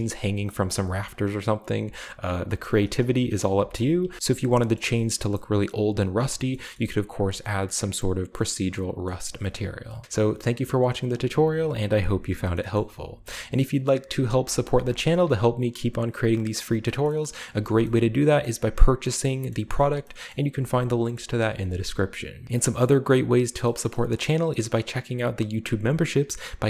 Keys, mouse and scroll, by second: 0.3 r, 0.7 g, 2.4-4.7 middle drag, 2.6-3.9 typing, 4.1-4.5 shift+scroll up 1, 4.9-5.8 shift+middle drag, 4.9-5.8 shift+scroll up 1, 6.0-7.1 scroll down 1, 6.3 shift+middle click, 7.4-8.8 shift+middle drag, 7.4-9.1 scroll up 1, 9.1 shift+middle click, 9.6-10.0 shift+scroll down 1, 10.0-11.8 typing, 10.4-11.6 drag, 12.3-13.4 shift+middle drag, 13.0 typing, 13.5-15.3 drag, 14.2 r, 14.7 g, 15.0 s, 16.4 click, 16.8 middle click, 17.4 middle click, 17.4 g, 18.4 middle click, 20.5 g.